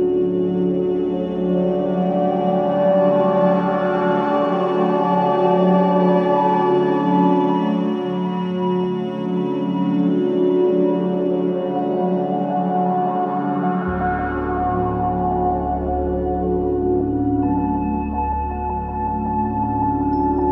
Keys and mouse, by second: 0.0-2.9 drag, 2.9 1, 3.2 Return, 4.0 click, 4.3 space, 6.1 space, 6.7-8.8 alt+drag, 9.4 click, 10.6-11.8 drag, 11.8 click, 12.6 0, 12.8 Return, 13.7 click, 14.1 space, 16.7 space, 17.8-20.5 alt+middle drag.